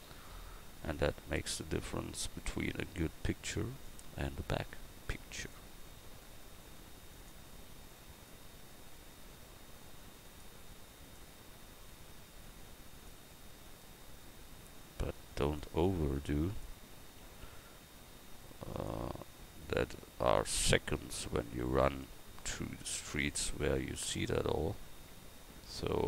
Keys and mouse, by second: 0.9-19.8 right drag, 19.8 Tab, 22.9 right click, 23.2 Tab, 25.7 g.